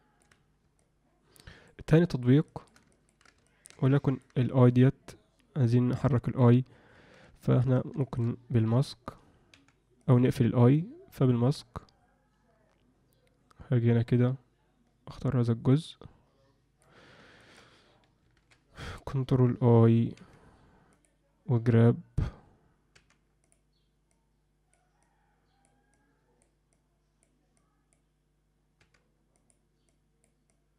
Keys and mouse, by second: 0.7 middle click, 1.9 middle click, 2.5 alt+shift+middle click, 2.9 ctrl+alt+middle click, 3.5 alt+shift+middle click, 3.9 alt+middle click, 4.5 alt+shift+middle click, 7.4 ctrl+middle click, 8.0 alt+shift+middle click, 9.5 f, 10.7-16.8 drag, 17.4 ctrl+alt+middle click, 18.4 ctrl+i, 20.1 f, 22.9 f, 24.1 click, 25.0 click, 25.9 click, 26.7 click, 27.5 click, 28.8 f, 29.9 click, 30.5 click.